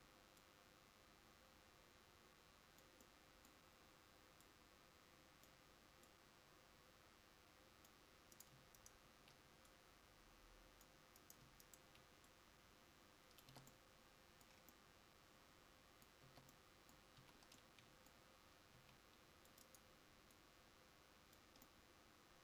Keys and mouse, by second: 13.6 Tab, 16.4 Tab, 17.3 a, 18.9 c.